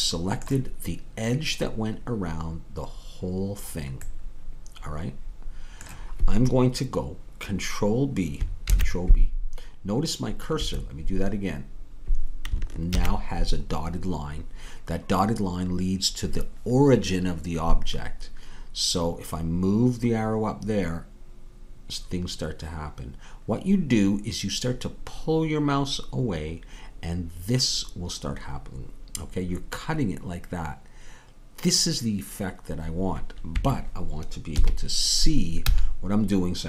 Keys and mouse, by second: 8.7 ctrl+b, 12.9 ctrl+b, 34.5 KP_3, 35.6 z.